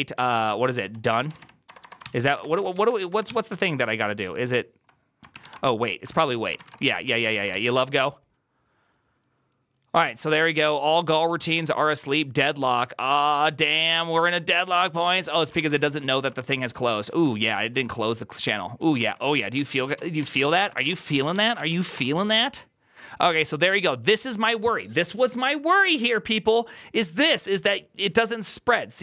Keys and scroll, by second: 0.0-3.9 typing, 1.9 ctrl+c, 2.0 ctrl+c, 5.2 ctrl+n, 5.4 ctrl+y, 5.9 ctrl+c, 6.1 ctrl+c, 6.2-8.0 typing, 11.1 ctrl+a, 11.4 [, 11.5 ctrl+u, 14.0-21.2 typing, 16.1 ctrl+u, 21.0 ctrl+a, 21.4 ctrl+c, 21.5 ctrl+c, 21.7 Up, 21.8 Return.